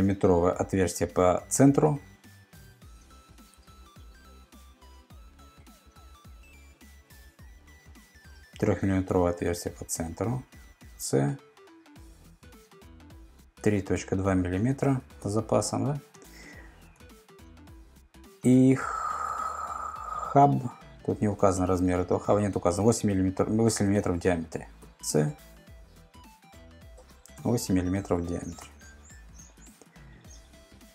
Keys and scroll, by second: 2.8 super+Tab, 3.6 super+Tab, 5.6 super+Tab, 6.8 super+Tab, 10.7 c, 13.3-14.5 typing, 15.2 Return, 16.8 super+Tab, 23.8 super+Tab, 24.8 c, 27.4 8, 28.6 Return.